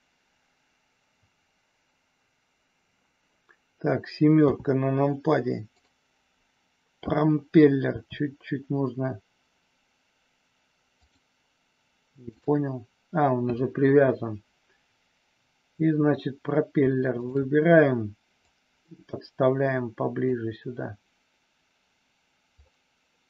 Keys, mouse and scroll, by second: 4.3 KP_7, 5.6 click, 7.8 r, 11.0 click, 18.5-20.2 drag, 22.6 scroll up 1, 22.7-23.2 middle drag.